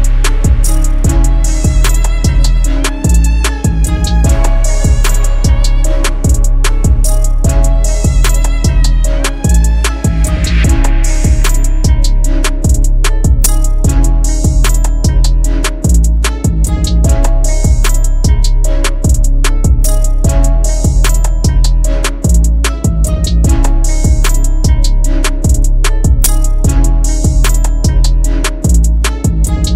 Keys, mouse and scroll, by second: 27.1-29.7 scroll down 1.